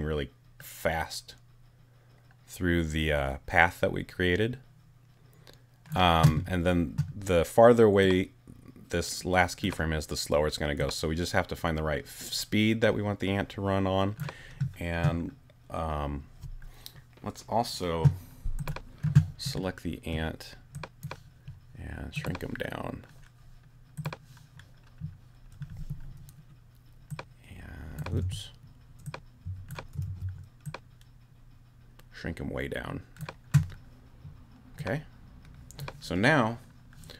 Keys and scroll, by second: 28.2 super+z, 30.0 alt+super+z, 30.6 super+z.